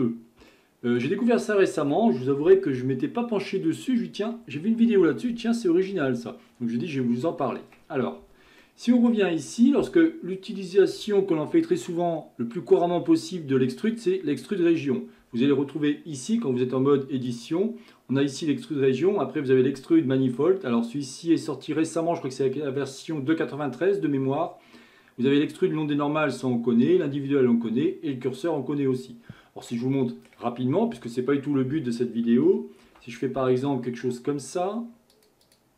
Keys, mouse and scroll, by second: 0.5-1.8 shift+middle drag, 1.8 KP_1, 8.6-11.7 middle drag, 17.3-20.4 drag, 30.0-31.0 middle drag, 31.0 KP_1, 31.5 scroll up 2, 32.9 ctrl+r.